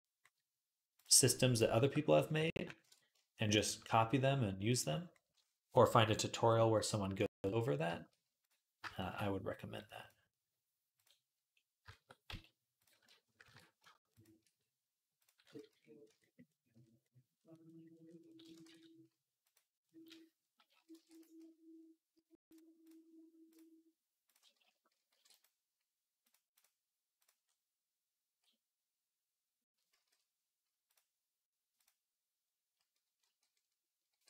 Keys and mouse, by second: 0.8 middle click, 1.3 click, 1.4-4.6 shift+middle drag, 2.7 ctrl+KP_Add, 4.6-7.1 drag, 7.1-9.7 middle drag, 9.7-10.8 drag, 10.8-12.6 middle drag, 12.1 z, 12.6 click, 12.7-15.0 ctrl+middle drag, 13.2 ctrl+KP_Add, 15.0-19.3 drag, 15.0 right click, 15.4 z, 15.9 Tab, 18.5 ctrl+s, 19.3-22.6 middle drag, 20.7 alt+d, 22.6 click, 22.7-24.1 middle drag, 24.1 click, 24.2-26.1 alt+middle drag, 24.9 alt+d, 26.1-27.9 drag, 27.9-30.0 middle drag, 29.7 ctrl+z, 33.0 alt+g, 33.9 alt+r.